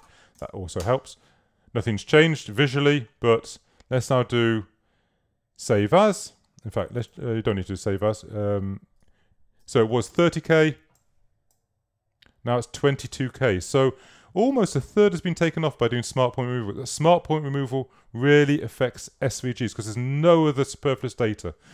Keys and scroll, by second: 0.4 alt+3, 0.5 0, 0.8 Return, 10.3 super+s.